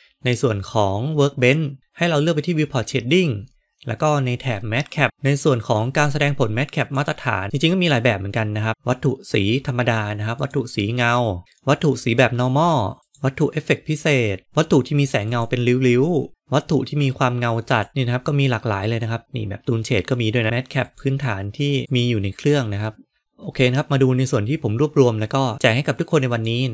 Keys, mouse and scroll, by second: 11.4-17.9 drag, 20.4-22.0 drag.